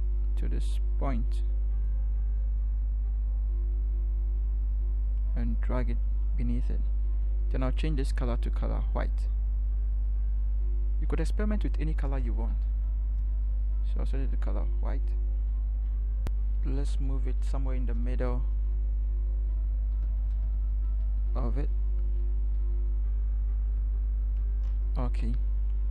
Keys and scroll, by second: 12.5 ctrl+-, 16.8 shift+Right, 17.1 shift+Right, 17.3 shift+Right, 18.0 Right, 18.5 Right, 18.7 v, 20.0 Right, 20.2 Right, 20.4 Right, 20.9 Left, 21.1 Left, 23.7 Right.